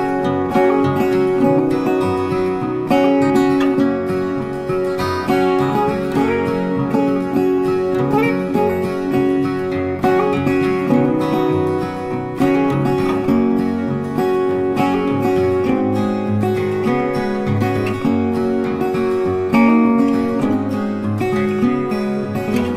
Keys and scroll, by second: 8.4 ctrl+t, 16.3 ctrl+t.